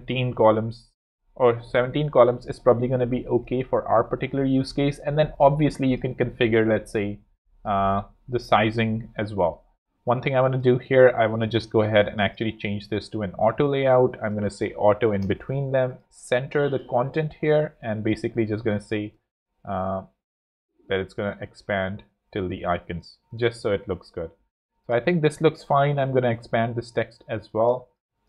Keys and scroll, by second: 0.0 7, 1.6 ⌅, 3.7 z, 8.7 super+z, 9.5 f, 9.8 Return, 10.2 z, 12.9 shift+a, 14.4-15.3 typing, 23.1 z, 23.6 space, 27.3 alt+z, 28.0 z.